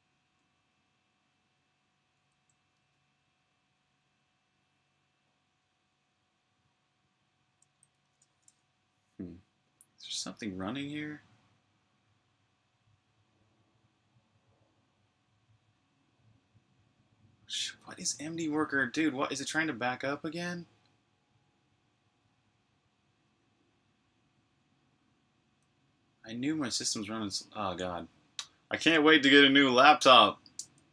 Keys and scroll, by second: 7.7 super+b, 7.8-9.0 typing.